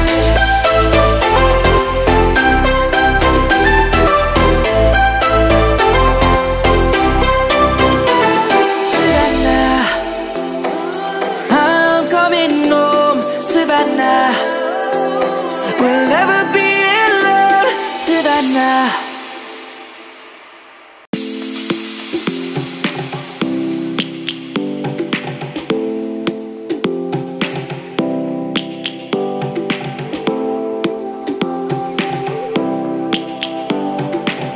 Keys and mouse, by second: 3.6 middle click, 4.4 click, 6.9 shift+click, 10.7 click, 15.1 shift+a, 15.1 m, 15.4 n, 15.5 e, 18.6 shift+s, 19.7 c, 22.2 click, 31.8 middle click, 32.6 click, 33.5 Tab, 34.1 middle click.